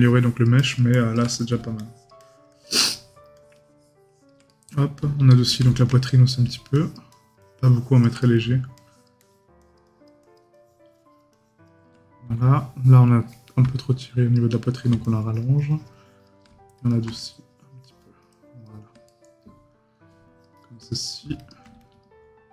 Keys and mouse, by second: 1.3 right click, 4.5 right click, 6.1 right click, 8.2 right click, 19.1 right click.